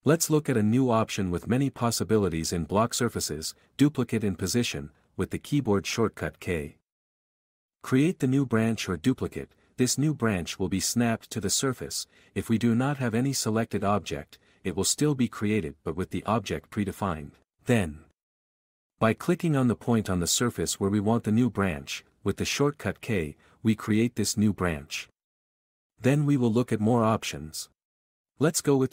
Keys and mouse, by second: 0.0-2.4 typing, 1.3 Tab, 1.5 alt+a, 5.6 alt+click, 9.6-12.3 drag, 12.3 k, 14.7 s, 15.2 click, 15.5 r, 15.7 r, 16.8 r, 18.0-19.3 typing, 23.3-26.2 typing, 27.3 r, 27.5 click, 27.7 s, 28.0 g, 28.3 g.